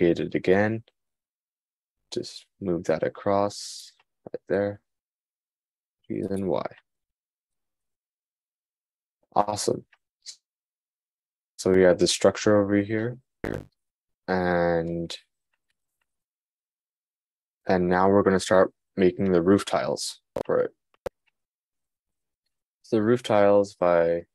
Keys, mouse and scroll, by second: 6.0 g, 19.9-23.0 shift+middle drag.